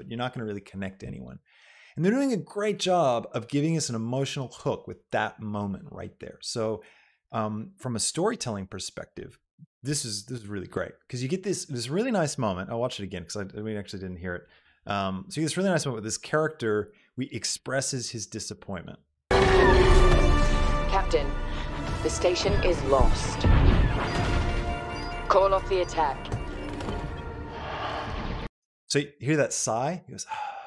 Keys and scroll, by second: 28.6 space.